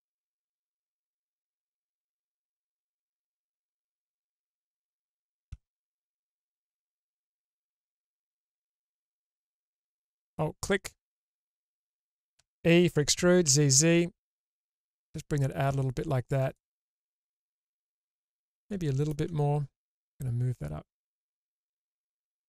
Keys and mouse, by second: 3.3-5.1 middle drag, 6.7 Tab, 8.1 alt+middle click, 9.1 alt+middle click, 9.7-11.4 middle drag, 12.4 e, 16.8-18.0 middle drag, 18.4 middle click, 20.0-21.9 drag, 22.2 ctrl+z.